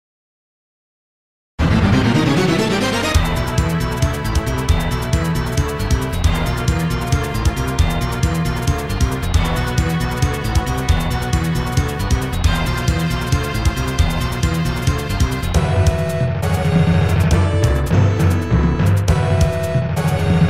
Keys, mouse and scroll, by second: 6.2-7.2 typing, 8.7-9.1 scroll up 2, 15.6 scroll down 2, 17.9 click, 18.4 click, 19.1-19.8 typing.